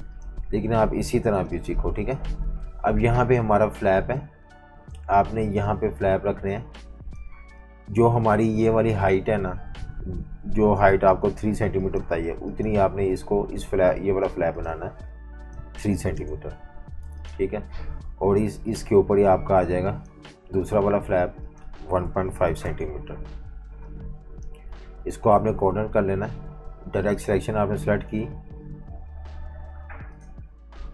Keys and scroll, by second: 1.3 v, 1.4 space, 16.0 3, 16.1 Return, 21.8-24.6 typing, 29.0 F19.